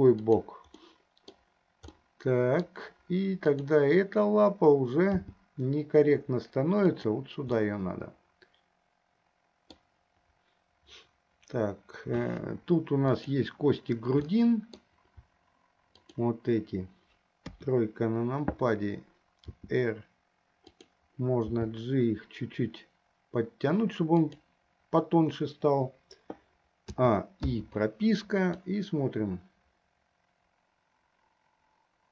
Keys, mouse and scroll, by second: 1.0 middle click, 2.2 middle click, 3.7 click, 5.5 g, 7.9-9.8 middle drag, 13.3 click, 14.5 middle click, 16.3 shift+click, 17.7 KP_3, 19.6 r, 21.8 g, 27.0 a, 27.9 i, 28.9-32.1 drag.